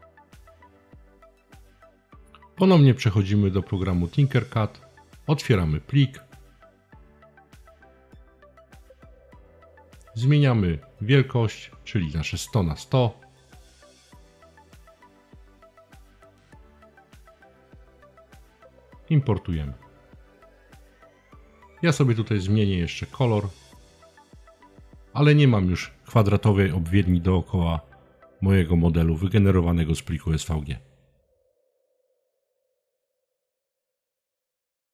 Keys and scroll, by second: 11.5-12.7 typing, 16.0-16.5 typing.